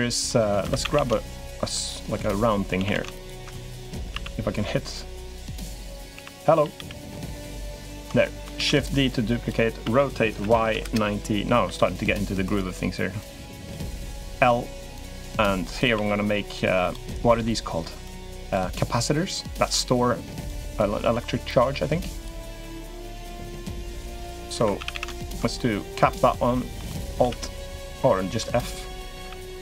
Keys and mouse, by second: 0.0 middle click, 0.5 2, 0.6 a, 0.7 a, 1.6 alt+shift+click, 2.5 a, 2.7 a, 3.0 alt+shift+click, 3.7 a, 3.9 a, 5.0 alt+shift+click, 6.4 a, 6.5 a, 7.4 alt+shift+click, 8.3 shift+d, 8.8 click, 9.6 r, 11.4 e, 13.0 click, 13.9 click, 14.1 l, 14.7 click, 15.7 s, 17.0 click, 17.8 click, 19.0 click, 20.2 click, 21.2 click, 23.5 click, 24.3 2, 24.5 a, 24.7 a, 25.0 alt+shift+click, 25.3 middle click, 26.1 middle click, 26.7 middle click, 27.0 f, 27.7 click, 29.0 a, 29.2 a.